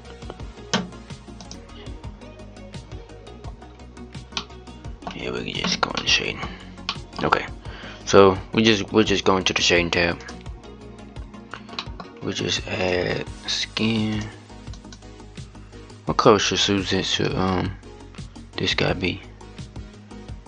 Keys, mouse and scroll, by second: 2.2 click, 3.3-4.1 scroll up 5, 4.1-10.3 middle drag, 10.3-13.9 drag.